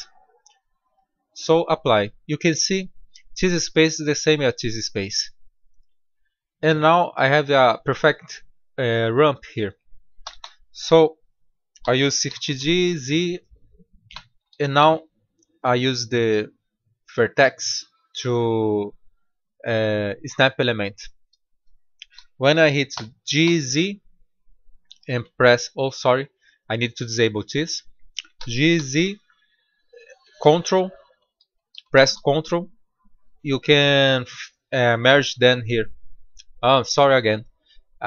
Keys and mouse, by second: 5.5 middle click, 10.1 a, 10.3 a, 12.1 shift+d, 15.6-17.3 drag, 17.4 click, 18.1-20.0 drag, 22.8 g, 26.2-28.0 drag, 28.3 g.